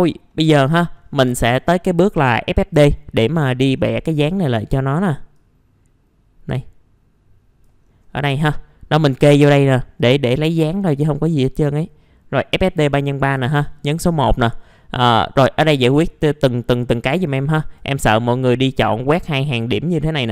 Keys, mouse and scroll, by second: 0.3 middle click, 1.3 F4, 1.6-2.1 scroll up 1, 2.1 click, 2.8 scroll up 1, 3.7-4.1 scroll down 1, 4.1 middle click, 4.4-7.8 drag, 7.8 scroll up 1, 8.1 middle click, 9.4 scroll up 1, 10.0-11.0 drag, 13.6 click.